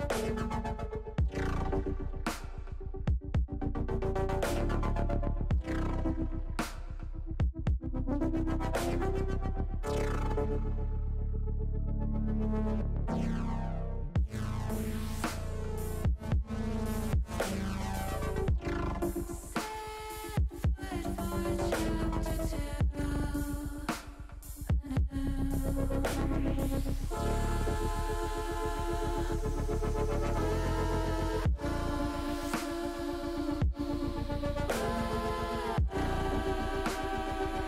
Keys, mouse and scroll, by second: 1.2 click, 2.2 shift+click, 2.6-4.0 middle drag, 4.9 shift+click, 6.6 ctrl+z, 8.2 click, 8.9 middle click, 9.9-11.1 middle drag, 13.2 s, 14.6 click, 15.6 click, 16.6-18.0 middle drag, 19.6 shift+middle click, 23.1 alt+shift+click, 24.0 ctrl+z, 25.3 alt+shift+click, 25.8 middle click, 27.9 ctrl+click, 28.3 ctrl+click, 29.1 ctrl+z, 29.7 ctrl+z, 30.8 shift+click, 31.3 shift+click, 31.6 middle click, 32.0 middle click, 34.9 ctrl+z, 36.8 shift+click.